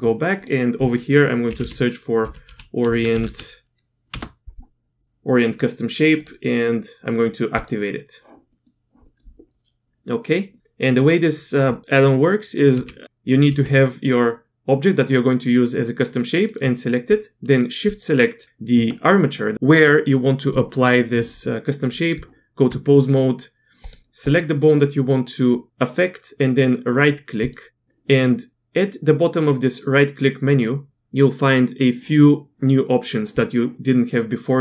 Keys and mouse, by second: 8.5 middle click, 9.1 middle click, 10.1 middle click, 10.5 middle click, 12.7 g, 13.5 g, 22.1 Tab, 24.3-25.5 drag.